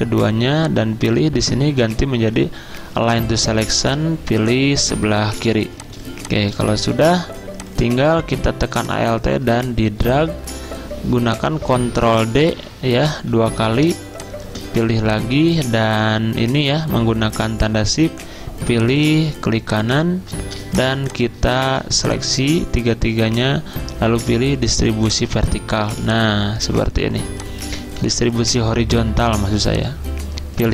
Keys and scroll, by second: 1.4 typing, 5.6-7.3 typing, 12.5 ctrl+d, 13.4 ctrl+d, 20.6 z, 21.7 v, 25.9 z.